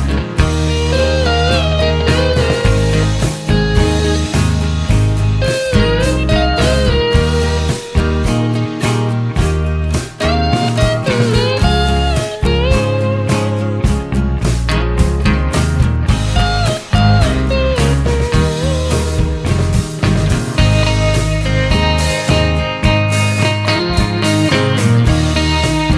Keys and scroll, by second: 0.0-0.9 typing, 15.4-22.7 typing.